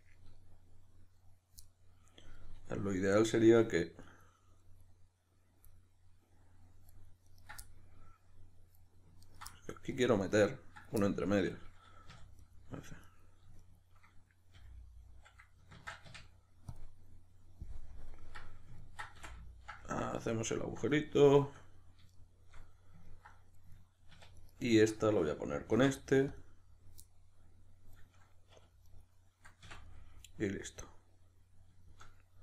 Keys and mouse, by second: 4.1 right click, 5.7-7.3 middle drag, 7.3 right click, 7.7-9.3 middle drag, 9.3 ctrl+right click, 9.5-10.2 middle drag, 10.2 right click, 11.0-12.4 shift+middle drag, 12.1 2, 12.4 right click, 13.1 right click, 13.6 shift+right click, 14.5 f, 17.9 KP_Decimal, 18.2-24.4 middle drag, 19.2 f, 24.1 1, 24.4 right click, 24.7 shift+right click, 25.7 alt+m, 27.1-28.8 middle drag, 28.5 2, 28.8 right click, 29.6 f, 29.8-32.4 middle drag.